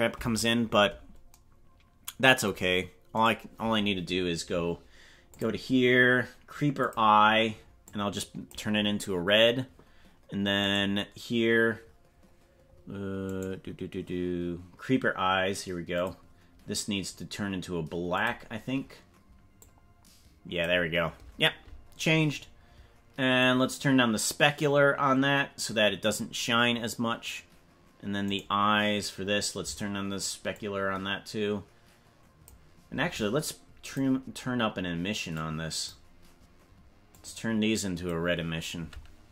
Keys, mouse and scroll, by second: 3.1 right click, 5.3 click, 6.8 click, 10.6 right click, 13.4 right click, 15.9 click, 18.2 click, 23.4-26.1 drag, 28.4 right click, 30.5-32.4 drag, 33.8 click.